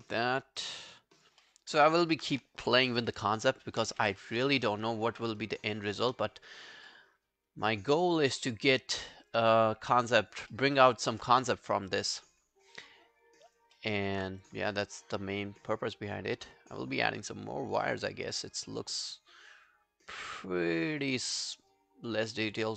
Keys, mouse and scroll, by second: 0.1 alt+click, 1.4 alt+middle click, 1.7 alt+right click, 1.9 alt+click, 3.0 ctrl+z, 3.8 ctrl+z, 4.5 right click, 6.7 scroll down 3, 6.9 alt+middle click, 7.5 alt+click, 8.4 alt+middle click, 8.9 alt+click, 9.6 alt+middle click, 9.8 alt+right click, 10.1 alt+click, 10.5 alt+middle click, 10.8 alt+right click, 11.2 alt+middle click, 11.5 alt+right click, 11.9 alt+click, 12.3 alt+middle click, 12.6 alt+scroll up 2, 12.8 alt+click, 13.9 alt+middle click, 14.0 alt+right click, 14.7 alt+middle click, 15.0 alt+right click, 15.2 alt+click, 18.4 alt+middle click, 18.6 alt+right click, 18.8 alt+click.